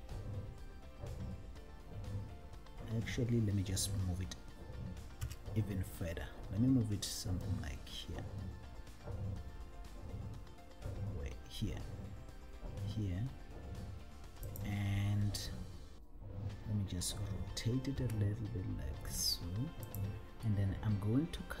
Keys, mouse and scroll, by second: 5.3 g, 14.9 click, 18.1 r, 20.2 click.